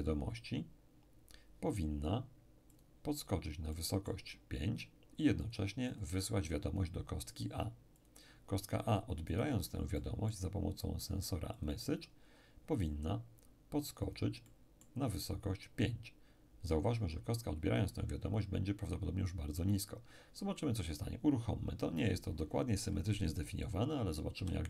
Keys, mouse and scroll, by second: 2.7-5.0 drag, 3.7-5.0 middle drag, 5.4-7.0 drag, 8.0 click, 9.3 right click, 10.0-11.3 middle drag, 11.6 click, 14.0-15.8 drag, 14.5-15.8 middle drag, 24.4 p.